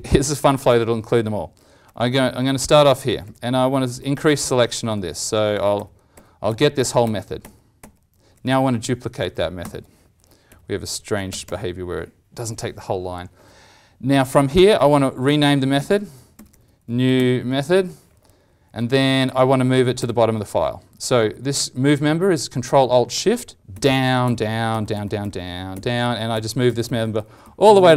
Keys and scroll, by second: 5.7 alt+shift+=, 6.1 alt+shift+=, 6.4 alt+shift+=, 6.7 alt+shift+=, 7.0 alt+shift+=, 7.4 alt+shift+=, 9.6 ctrl+d, 14.7 ctrl+Right, 14.9 ctrl+Right, 15.1 ctrl+Right, 15.8 ctrl+shift+Right, 18.6 ctrl+Left, 23.7 ctrl+alt+shift+Down, 24.2 ctrl+alt+shift+Down, 24.6 ctrl+alt+shift+Down, 24.9 ctrl+alt+shift+Down, 25.2 ctrl+alt+shift+Down, 25.7 ctrl+alt+shift+Down.